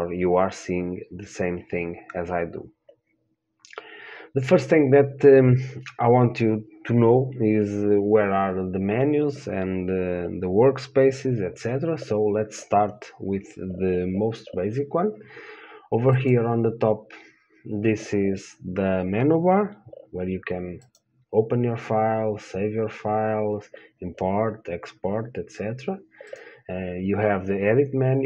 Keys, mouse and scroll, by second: 16.4-20.6 drag, 21.1-23.7 drag.